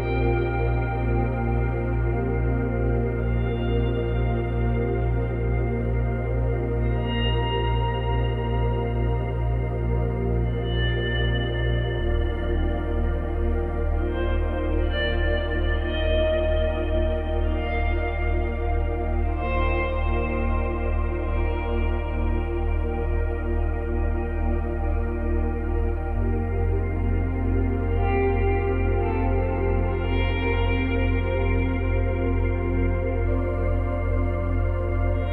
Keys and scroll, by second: 5.5 space, 7.4 ctrl+z, 10.9 space.